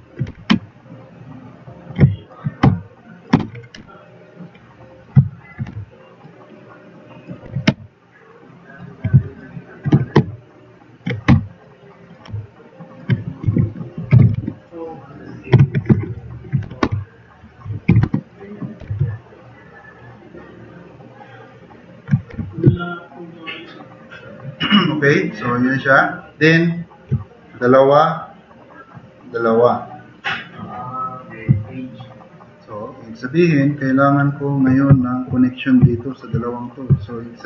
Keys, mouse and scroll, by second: 0.3 e, 0.9-2.2 drag, 2.7-3.2 drag, 2.7 t, 3.4 ctrl+z, 3.8 t, 4.0-4.6 drag, 5.4 click, 5.7 e, 6.2-7.2 drag, 7.5 t, 7.6-8.6 drag, 9.9 e, 10.4 click, 11.3 t, 11.6-12.0 drag, 12.2 click, 13.5-14.9 typing, 14.6 click, 15.6 ctrl+z, 15.9-19.3 typing, 21.1 e, 22.3 4, 24.4-24.8 drag, 32.6-33.0 drag, 33.0 middle drag, 33.6 middle click.